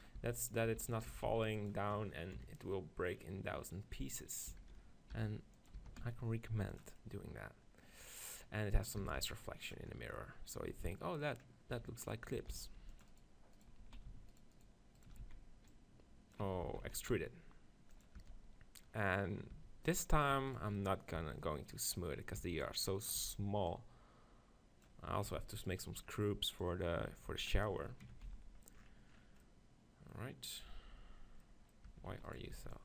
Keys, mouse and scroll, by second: 0.0-1.1 typing, 2.4 KP_7, 4.6 s, 5.9 s, 7.0 click, 8.0 click, 8.4 middle click, 9.1 s, 9.7-11.5 drag, 11.5 middle click, 11.8 Tab, 11.9 middle click, 12.1-15.9 right drag, 12.6 ctrl+r, 13.9 z, 15.3 z, 15.7 click, 16.7 ctrl+z, 17.0 right click, 17.0 e, 18.0 click, 18.2 Tab, 19.6 Tab, 20.5 click, 21.2 b, 22.5 b, 23.2 z, 23.7 click, 25.4 Tab, 25.5 z, 26.6 click, 28.3 z, 31.9 Tab, 32.2 z, 32.3 middle click.